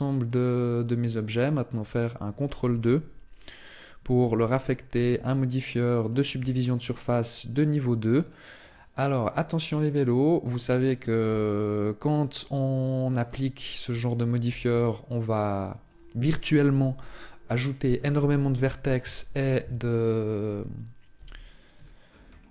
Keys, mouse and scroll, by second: 0.2 right click, 0.8 right click, 2.6 ctrl+2, 3.5 right click, 4.0 ctrl+2, 4.4 right click, 4.9 ctrl+2, 5.8 right click, 6.1 ctrl+2, 7.2 right click, 8.0 right click, 9.8 click, 12.0 right click, 12.8 right click, 14.5 Tab, 20.9 z, 21.6 shift+middle click, 22.0-22.5 scroll up 4.